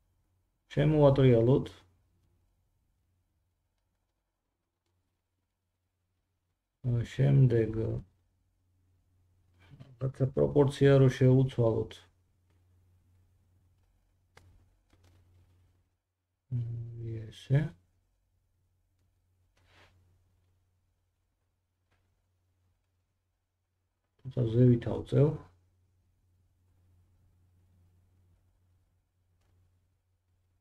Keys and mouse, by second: 0.6 r, 16.9-27.0 middle drag, 16.9 s, 27.0 click, 28.0 g.